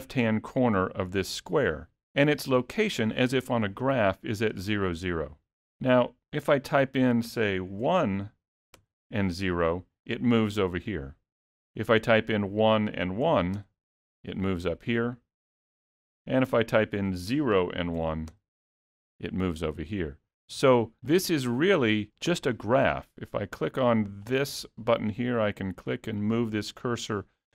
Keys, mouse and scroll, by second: 6.8 click, 12.4 click, 16.9 click, 21.2 click, 24.4 click, 25.7 click, 26.3 click, 27.3 click.